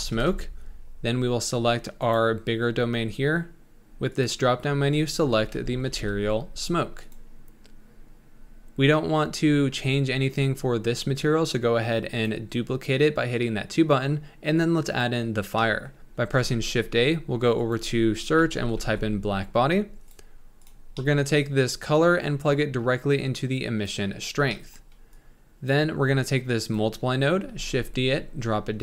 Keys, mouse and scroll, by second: 0.2-1.7 drag, 2.0 click, 4.2-7.9 drag, 8.4 scroll down 1, 12.7-14.7 drag, 15.7 middle click, 16.6 shift+a, 23.9 click, 24.4 scroll down 2, 24.6 middle click, 25.3 click, 26.6 click, 27.5 shift+d.